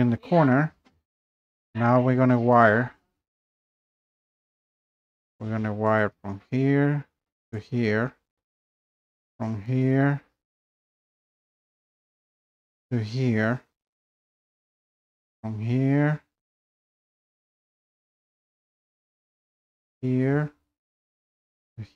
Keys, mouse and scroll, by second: 0.1-0.6 scroll down 2, 0.7-1.0 scroll, 1.7 scroll down 2, 2.6 click, 3.5 scroll up 2, 4.4 scroll up 1, 5.6-6.0 scroll, 6.0 click, 6.6 scroll up 3, 7.6 click, 7.8 scroll up 3, 9.2 scroll, 9.3 click, 12.6 click, 13.8 click, 15.4 click, 19.8 click, 21.6 click.